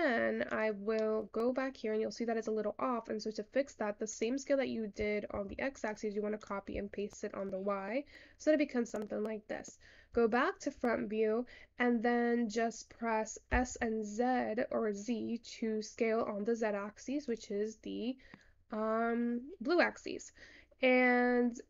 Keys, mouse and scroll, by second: 1.5-4.4 middle drag, 4.4-6.2 drag, 6.5-7.9 drag, 7.9-8.7 scroll up 8, 8.7-9.4 scroll down 5, 9.4-10.5 middle drag, 11.7-12.5 scroll down 8, 12.5-13.9 scroll up 6, 13.9 s.